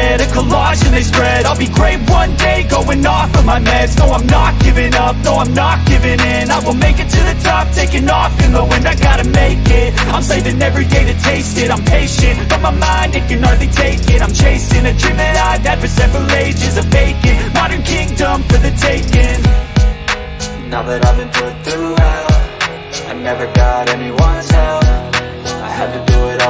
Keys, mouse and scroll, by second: 2.1 click, 4.1 drag, 6.4 middle click, 7.5-7.9 middle drag, 8.6 middle click, 9.7-12.5 drag, 14.4 alt+drag, 15.0-15.7 alt+drag, 16.8 click, 18.1 g, 22.3-23.3 middle drag, 24.5 middle drag.